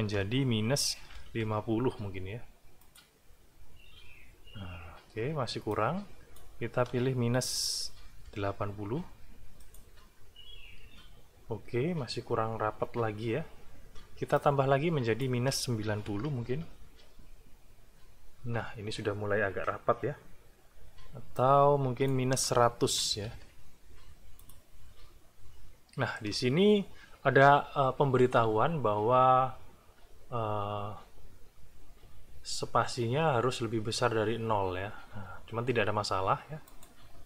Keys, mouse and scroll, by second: 1.1 5, 1.4 0, 2.8 click, 5.7 click, 8.0 KP_8, 8.3 KP_0, 9.6 click, 14.3 click, 15.8 KP_9, 16.1 KP_0, 16.4 Return, 21.3 click, 22.9 KP_1, 23.1 KP_0, 24.4 click, 36.7 click.